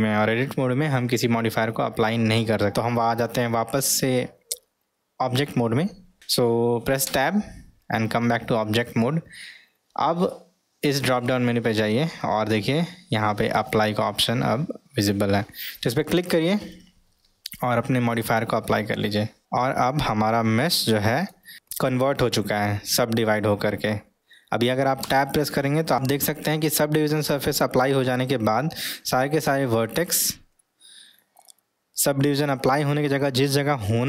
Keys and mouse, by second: 7.1 Tab, 11.0-16.1 drag, 18.7-20.1 middle drag, 20.8-21.3 middle drag, 25.0 Tab, 28.3-28.9 middle drag, 30.6-31.5 middle drag, 32.9-33.5 middle drag.